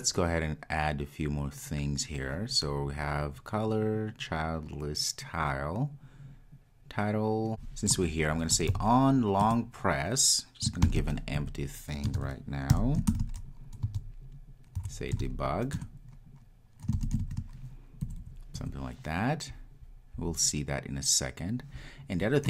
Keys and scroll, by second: 9.6 Return, 16.0 Return.